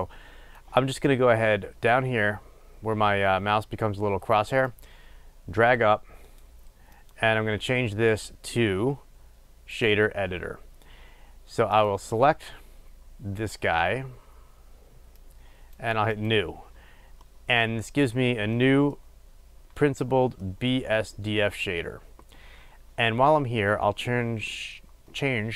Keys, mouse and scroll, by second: 15.5-25.5 drag.